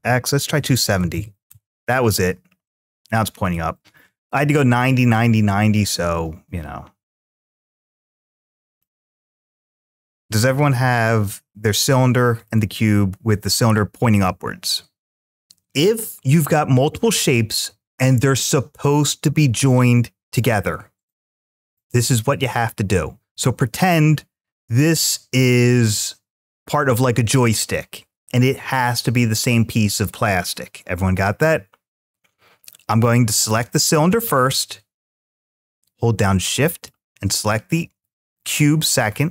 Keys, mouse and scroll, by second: 0.7 2, 1.3 Return, 2.5-3.4 middle drag, 7.1 click, 7.7-8.6 scroll up 3, 8.6-11.3 middle drag, 12.3-15.3 middle drag, 33.3 click, 36.5 shift+click.